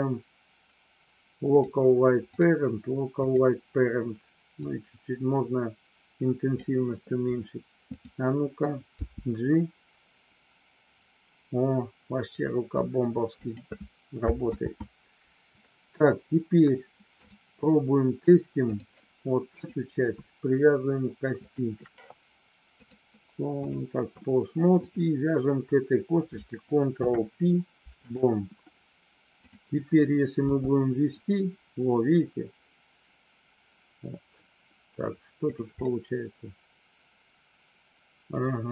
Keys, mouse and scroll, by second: 2.4-3.4 drag, 4.6-6.5 drag, 7.8 click, 8.8 g, 13.4 click, 14.6 ctrl+z, 17.2-18.7 drag, 21.4 shift+click, 22.8-23.8 drag, 26.8 ctrl+p, 29.4 click, 30.4 g, 35.4 click, 35.8-38.7 scroll up 1.